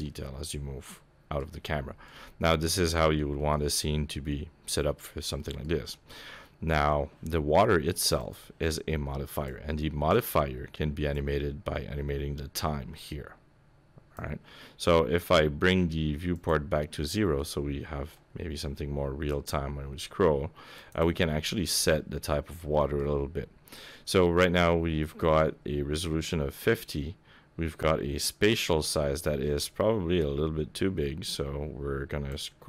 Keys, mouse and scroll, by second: 0.0-0.3 scroll up 5, 0.5 middle click, 1.5-2.0 scroll up 3, 2.0 middle click, 3.2 shift+middle click, 3.6 middle click, 5.4 shift+middle click, 5.8 scroll up 1, 6.1 middle click, 8.2 click, 9.3 click, 11.1 click, 16.3 click, 17.1-18.2 scroll down 2, 17.4 middle click, 18.2-19.3 scroll up 3, 19.3 click, 21.4 shift+middle click, 21.9 middle click, 22.7 shift+middle click, 28.2 click.